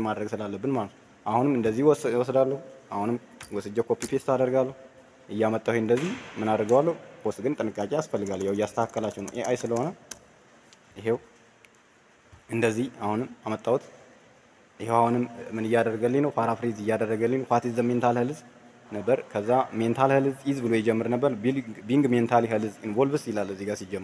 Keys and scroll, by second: 3.3 ctrl+a, 3.9 ctrl+v.